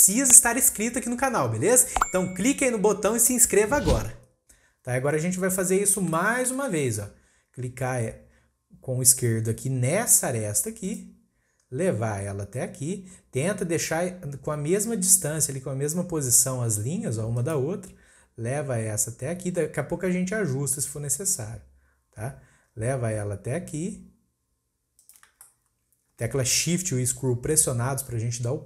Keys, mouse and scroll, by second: 5.7-6.1 scroll up 2, 6.1-7.9 shift+middle drag, 7.9-9.3 scroll up 1, 9.3-10.8 scroll up 1, 10.8-14.0 drag, 25.4-28.5 shift+middle drag.